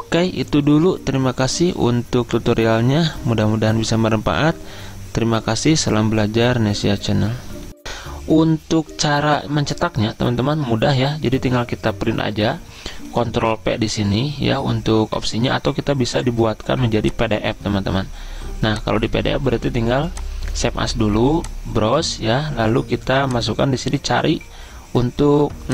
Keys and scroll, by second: 10.4 ctrl+p.